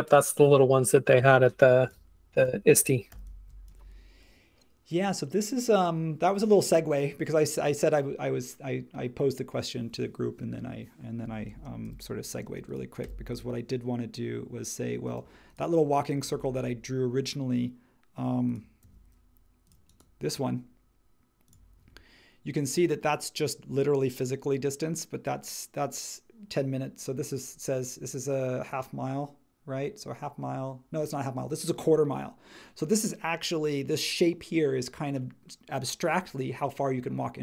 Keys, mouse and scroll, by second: 3.1 h, 11.5 space, 11.8 m, 12.4 space, 13.0 m, 16.1 space, 18.8 n.